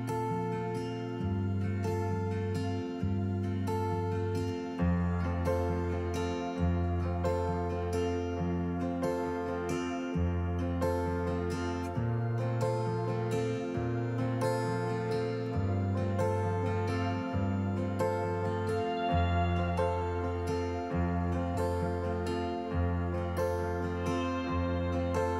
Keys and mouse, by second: 2.8-4.1 drag, 4.4 Tab, 5.7 ctrl+r, 11.5 click, 12.4 a, 13.6 Tab, 14.6 g, 14.9 z, 16.4 click, 17.2 KP_1, 19.0 KP_7, 20.0 KP_3, 22.1 Tab.